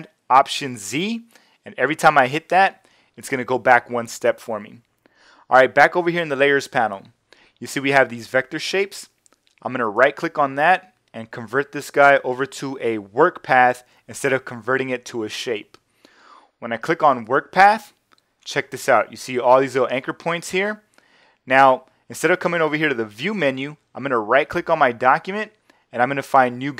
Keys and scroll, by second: 0.8 alt+super+z.